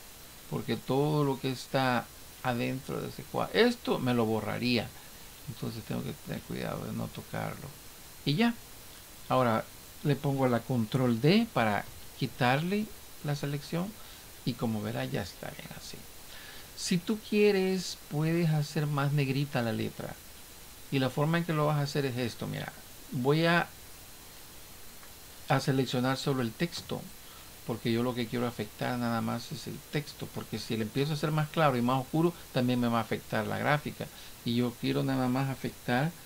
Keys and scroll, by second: 11.9 ctrl+d.